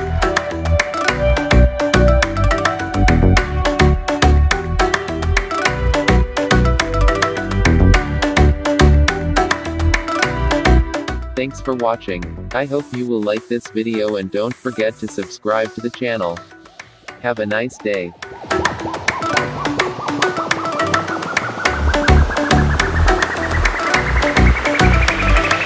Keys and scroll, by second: 4.6 ctrl+0.